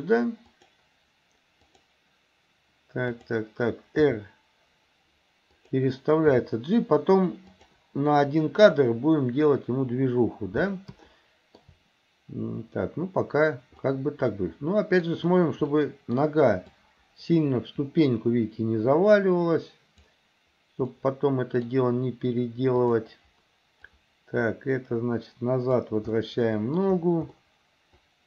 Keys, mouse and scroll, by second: 3.2 click, 4.1 r, 6.3 g, 11.2 shift+middle click, 13.9-15.1 middle drag, 15.7-16.2 middle drag, 16.7 click, 17.0-20.2 drag, 20.9 scroll up 1, 21.1 middle click, 22.8 click, 23.9-25.9 drag, 26.2 scroll up 2, 26.2 middle click, 27.4-28.2 middle drag.